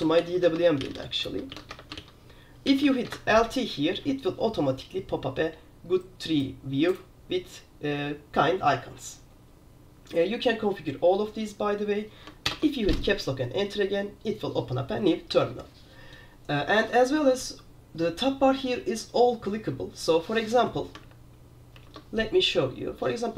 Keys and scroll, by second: 0.0-3.2 typing, 12.6 super+Return, 15.4 super+q, 21.1 super+2, 21.9 super+3.